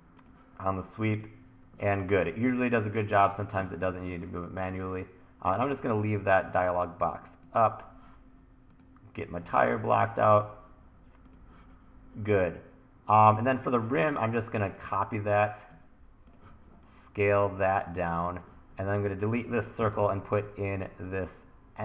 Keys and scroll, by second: 5.7 t, 16.5 t, 19.8 BackSpace.